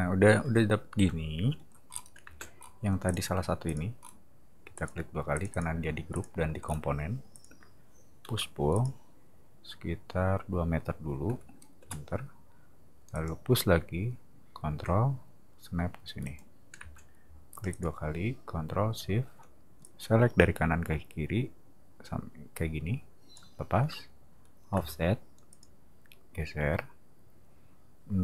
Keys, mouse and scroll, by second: 1.9 middle click, 2.2 space, 2.6 middle click, 3.0 click, 3.7 click, 4.0 middle click, 4.7 click, 5.3 click, 6.1 click, 6.6-7.0 scroll down 2, 7.3 click, 8.2 p, 8.7 click, 11.2 2, 11.8 Return, 13.1 click, 16.2 click, 16.7 space, 17.5 click, 17.7 click, 19.8-23.3 ctrl+shift+drag, 24.7 f, 25.5 click.